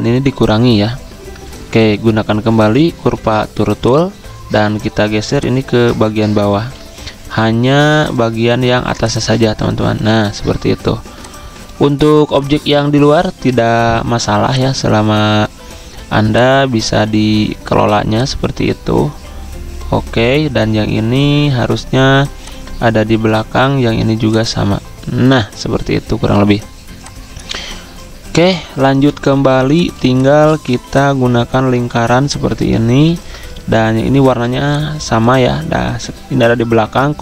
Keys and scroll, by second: 1.9 shift+Tab, 6.6 ctrl+z, 28.9-29.5 typing, 30.5 typing, 31.7 l, 34.3 v, 36.8 ctrl+x.